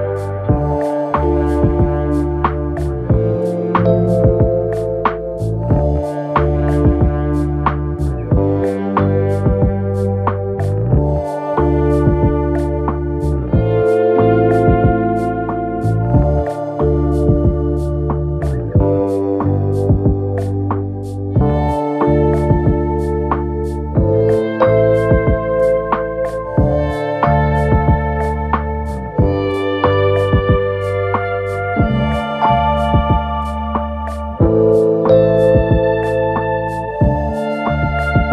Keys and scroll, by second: 3.3 4, 4.8 2, 11.3 Escape, 11.9 f, 17.8 Escape, 22.0 4, 23.4 3, 23.9 ], 24.6 4, 26.5 3, 33.0 Delete, 34.3 ], 35.8 ], 37.2 4.